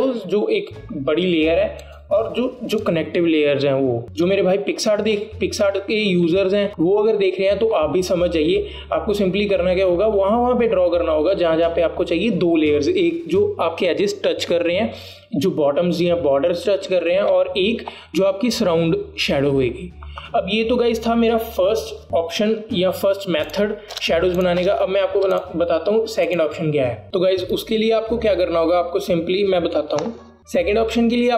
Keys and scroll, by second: 25.1 BackSpace, 25.7 BackSpace.